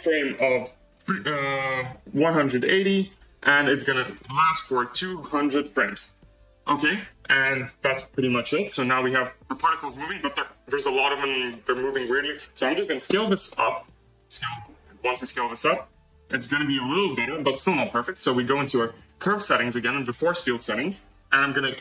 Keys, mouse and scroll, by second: 0.8-3.5 drag, 4.1-5.6 drag, 5.6 0, 8.8 space, 11.4 space, 11.7-12.0 scroll down 1, 12.3-12.7 drag, 13.4 s, 15.6 c, 16.7 space, 18.9-19.7 drag, 20.5 space, 21.7 space.